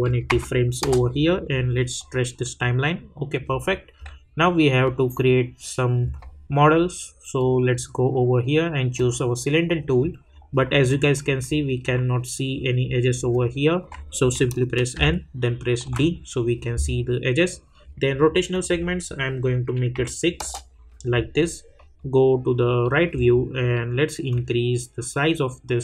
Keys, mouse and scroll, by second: 0.8 Return, 2.0-4.8 drag, 7.3-8.9 drag, 10.9-14.9 alt+drag, 14.9-15.8 typing, 18.5 click, 20.4 Return, 21.7 middle click, 23.1 scroll down 1, 24.3-25.8 drag.